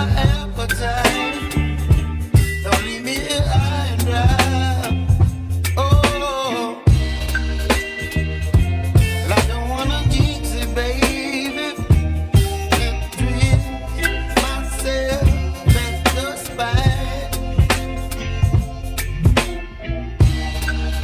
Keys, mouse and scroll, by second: 1.3 shift+d, 8.9 ctrl+z, 9.3 ctrl+z, 10.5-12.2 drag, 12.2 Tab, 13.1 ctrl+a, 14.3 Tab, 15.2-17.3 right drag, 17.3 i, 20.6-21.0 scroll up 2.